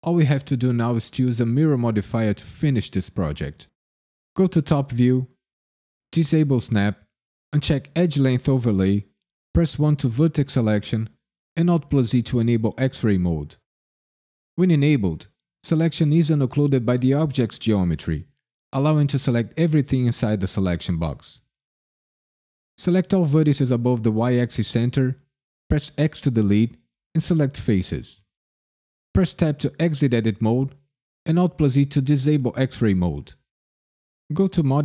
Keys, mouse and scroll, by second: 4.3 KP_7, 4.9 KP_Decimal, 6.7 click, 9.7 1, 11.5 alt+z, 20.5 click, 25.9 x, 29.3 Tab, 31.2 alt+z.